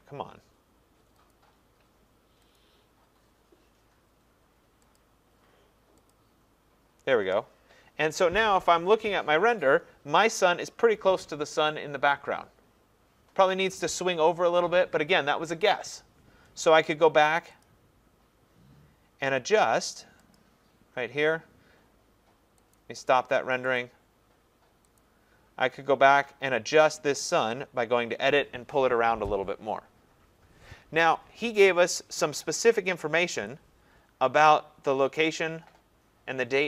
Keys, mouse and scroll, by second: 1.3 click, 2.6 click, 4.9 click, 6.3 click, 17.7 click, 20.6 click, 23.8 click, 25.0 click, 33.5 click.